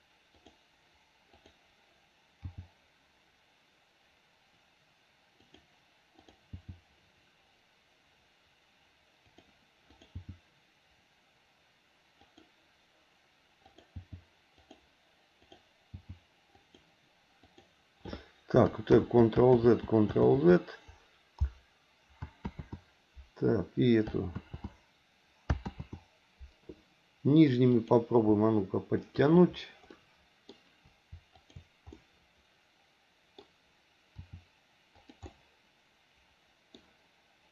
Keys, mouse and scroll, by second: 1.3 click, 6.2 click, 6.5 g, 9.9 click, 10.2 g, 13.7 click, 13.9 g, 15.4 click, 15.9 g, 17.4 click, 18.7 ctrl+click, 19.6 ctrl+z, 20.3 ctrl+z, 22.5 ctrl+z, 24.4 ctrl+z, 25.7 ctrl+z, 27.7 click, 29.0 shift+click, 29.9 middle click, 31.4 shift+click, 31.9-33.4 middle drag, 34.2 r, 35.3-36.7 middle drag.